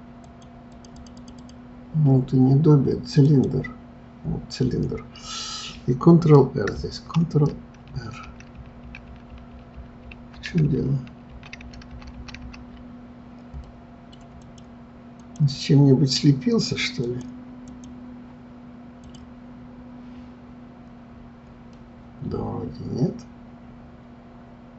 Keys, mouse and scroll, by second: 0.7 click, 0.9 click, 1.1 click, 1.3 click, 3.2 click, 4.8-7.2 middle drag, 7.2 ctrl+r, 15.2 click, 17.0-19.2 drag, 21.7-24.7 middle drag.